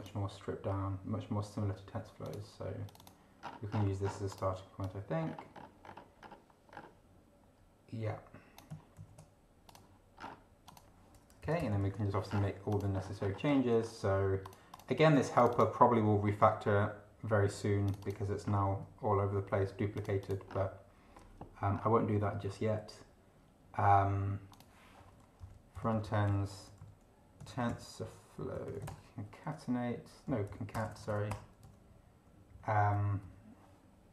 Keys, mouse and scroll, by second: 2.2 click, 2.9 click, 3.5-4.0 scroll down 2, 4.0 scroll down 2, 4.3 click, 4.8 click, 5.2-5.8 scroll up 2, 5.8-6.2 scroll up 2, 6.7-7.0 scroll up 2, 9.0 ctrl+c, 9.7 click, 10.2 scroll down 2, 10.7 click, 11.4 Return, 11.8 ctrl+v, 12.3 ctrl+scroll down 3, 12.7 click, 13.0-13.8 scroll up 2, 14.4 click, 15.4 click, 17.9 click, 18.4 scroll down 2, 20.0 click, 20.5 scroll down 2, 21.8 scroll down 2, 24.5 click, 25.4 Left, 26.0 ctrl+shift+Right, 26.6 ctrl+shift+t, 26.8 ctrl+shift+e, 27.2-29.2 typing, 30.2 End, 30.4 Left, 30.7 BackSpace, 31.6 End, 32.5 Down.